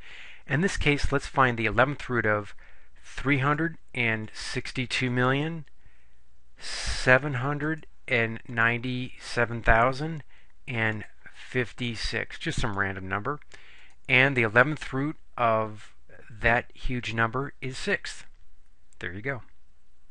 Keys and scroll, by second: 3.5 3, 4.4 6, 5.2 2, 7.8 7, 8.6 9, 9.3 7, 11.0 0, 12.0 5, 12.7 6, 13.8 Return.